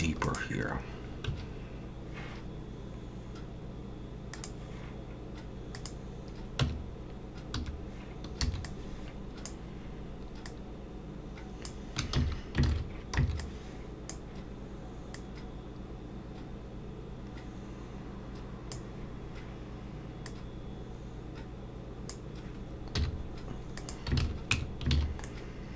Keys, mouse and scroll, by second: 1.3 1, 4.3 click, 5.7 click, 6.6 Tab, 7.6 1, 8.4 b, 10.5 click, 12.2 ctrl+z, 12.7 alt+a, 13.2 b, 15.1 click, 20.3 click, 22.9 z, 24.2 alt+a, 24.5 Tab, 24.9 alt+a, 25.2 middle click.